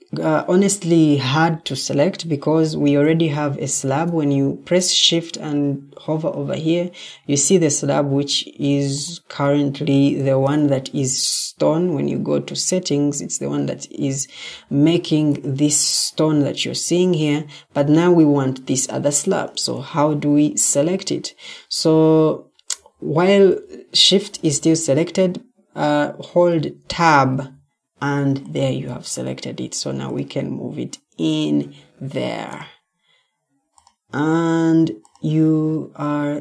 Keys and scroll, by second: 10.2 ctrl+t, 14.1 Escape, 20.5 Escape, 21.9 Escape, 22.6 Escape, 23.3 Escape, 27.2 shift+Tab.